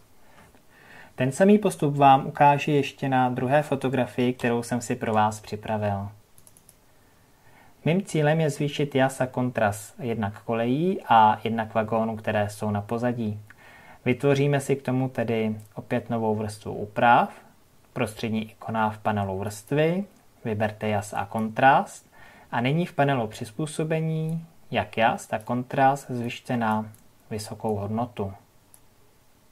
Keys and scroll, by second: 4.3 ctrl+o.